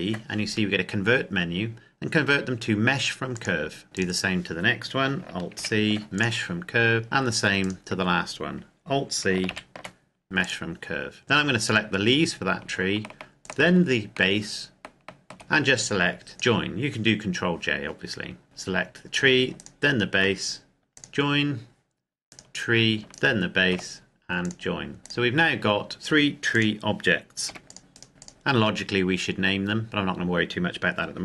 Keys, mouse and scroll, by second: 3.4 click, 4.0 right click, 5.6 alt+c, 6.2 click, 7.0 scroll down 1, 7.0 shift+middle click, 7.8 right click, 9.5 alt+c, 10.6 click, 11.8 right click, 13.7 shift+right click, 15.4-16.1 scroll up 1, 16.3 click, 18.4 right click, 19.6 shift+right click, 21.0 click, 22.3 right click, 23.2 shift+right click, 24.4 click, 25.0 right click, 27.6 g, 27.7 click, 28.0 right click, 28.1 g, 28.2 click, 29.8-31.2 scroll down 1.